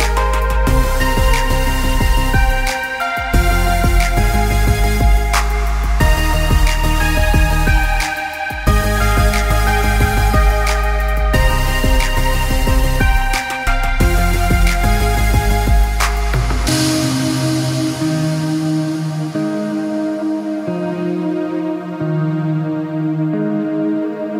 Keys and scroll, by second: 8.4 ctrl+z, 8.7 ctrl+-, 10.6 ctrl+=.